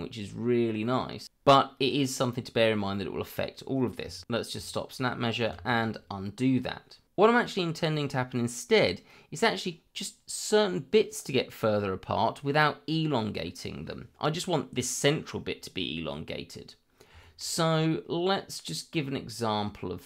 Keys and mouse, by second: 2.4 click, 3.8 middle click, 4.2 Escape, 5.5 ctrl+z, 7.1 middle click, 7.3 shift+middle drag, 7.7 middle click, 9.7 middle click, 12.6 middle click, 14.8-15.3 middle drag, 15.5 middle click, 16.3-16.7 middle drag, 17.2 shift+middle click.